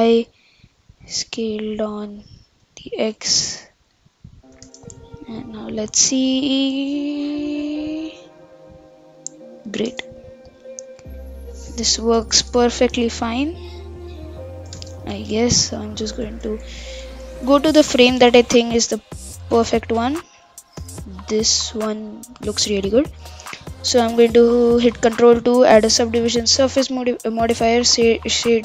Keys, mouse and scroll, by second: 0.0 s, 2.4 g, 4.6 shift+space, 5.0-8.1 middle drag, 9.9 shift+space, 10.2-11.2 middle drag, 11.2-12.0 scroll up 2, 12.0 shift+Left, 12.3 shift+space, 13.1-14.8 middle drag, 14.8 shift+space, 15.2 Left, 15.4 Left, 15.6 Left, 15.7 Left, 15.9 Left, 16.1 Left, 16.3 Left, 16.5 Left, 16.7 Left, 16.9 Left, 17.2 Left, 17.4 Left, 17.6 Left, 17.8 Left, 18.0 Left, 18.3 Left, 18.5 Left, 18.7 Left, 18.9 Right, 19.5 Left, 19.7 Right, 19.9 Right, 20.0 Right, 21.1-24.2 middle drag, 24.7 click, 25.1 ctrl+2, 25.6-28.6 right drag.